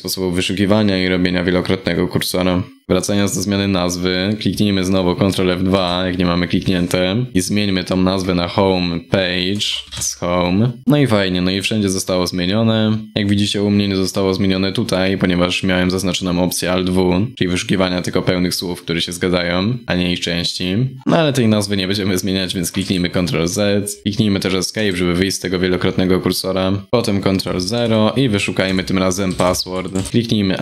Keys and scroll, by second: 5.3 ctrl+F2.